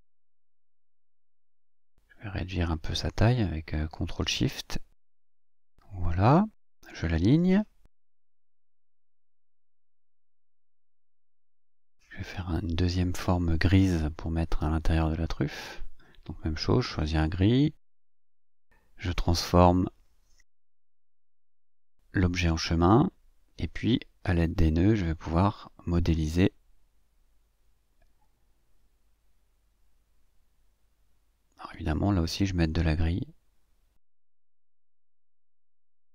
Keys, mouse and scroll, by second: 0.2 click, 1.7 click, 3.7-5.1 ctrl+shift+drag, 5.2-7.6 ctrl+shift+drag, 8.1 click, 9.0 shift+click, 10.3 click, 15.1 click, 15.9-17.1 ctrl+shift+drag, 20.0 click, 23.0 click, 23.6 click, 25.0 click, 28.6 click, 31.0-32.1 drag, 32.6-34.7 drag.